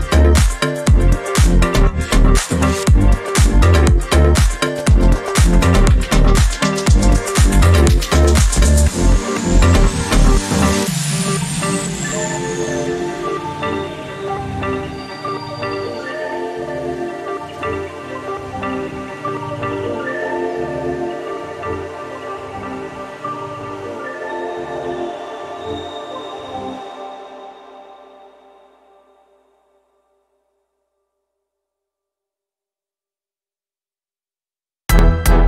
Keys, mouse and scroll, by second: 0.3 click, 1.1-2.5 drag, 2.6-3.1 ctrl+scroll down 4, 3.4 ctrl+click, 5.7 click, 7.2 click, 7.7 click, 9.3 click, 10.0 click, 10.8-11.3 ctrl+scroll up 2, 11.8 ctrl+click, 13.4 ctrl+click, 14.1 ctrl+click, 15.7-17.2 ctrl+drag, 18.2 click, 19.7-22.2 drag, 23.2 click, 24.1 shift+click, 25.3 ctrl+g, 26.4 click, 28.0 click, 29.1 click, 29.9 click, 30.3 click, 31.3 click, 31.9 click, 33.0 click, 34.1-35.4 ctrl+drag.